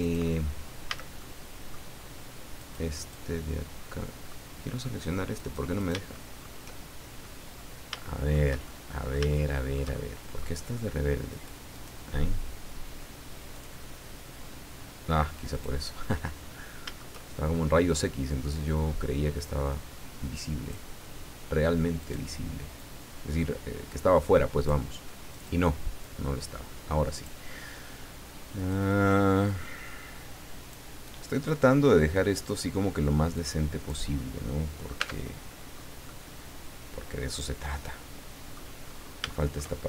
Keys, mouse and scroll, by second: 0.9 a, 1.2 middle click, 2.6 right click, 3.0 right click, 3.3-4.4 drag, 5.3 right click, 5.9 shift+right click, 6.1 shift+middle click, 7.2-8.5 middle drag, 8.6-10.6 shift+middle drag, 11.3 right click, 11.7 right click, 11.8 middle click, 13.5 click, 15.5 right click, 16.1-17.1 middle drag, 18.0 click, 18.8-19.5 scroll up 2, 22.0 right click, 22.7-24.9 drag, 25.3 right click, 26.0-27.4 drag, 28.5 right click, 29.4-30.9 drag, 31.4 right click, 33.3 click, 34.3 middle click, 35.0 Tab, 35.3-35.7 scroll down 1, 36.1-38.7 middle drag, 38.8-39.2 scroll up 3, 39.3-39.8 shift+middle drag.